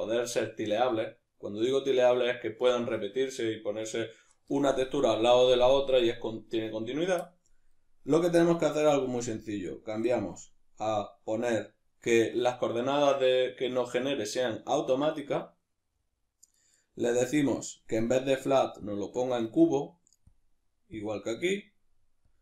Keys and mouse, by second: 9.4-15.9 drag, 15.9-18.0 middle drag, 18.0-19.6 drag, 19.6 middle click, 20.3-21.3 drag, 21.3-22.3 middle drag, 22.3-22.4 drag.